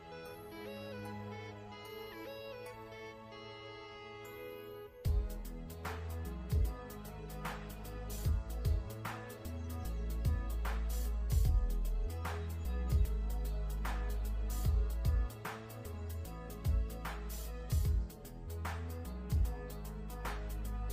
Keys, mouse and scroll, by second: 0.4 ctrl+Num_Lock, 1.0 click, 3.4 alt+shift+scroll down 2, 4.2 ctrl+z, 4.5 click, 4.8 alt+shift+scroll up 2, 5.7 click, 10.0 alt+shift+scroll down 1, 10.8 scroll up 1.